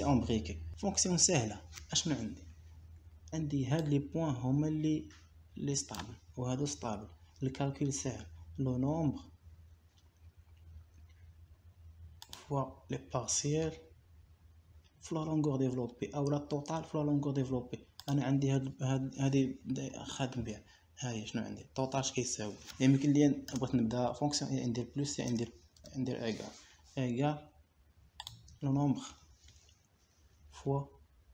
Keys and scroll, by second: 21.1 Delete, 22.5 =, 23.7 BackSpace, 24.9 =, 26.7 BackSpace, 27.2 shift+=, 30.8 ;.